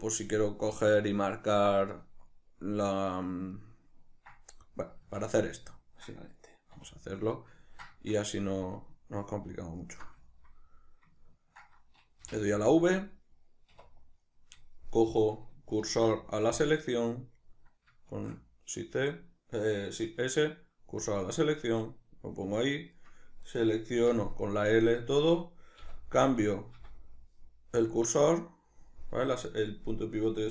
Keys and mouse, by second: 3.6 ctrl+middle click, 5.1 Tab, 5.1-9.8 middle drag, 6.8 2, 9.8 alt+right click, 10.3-12.6 ctrl+middle drag, 12.3 v, 12.6 right click, 13.7 1, 15.9 shift+s, 16.9-23.5 middle drag, 18.2 shift+s, 23.5 right click, 24.0 l, 25.8 -, 29.1-30.5 middle drag.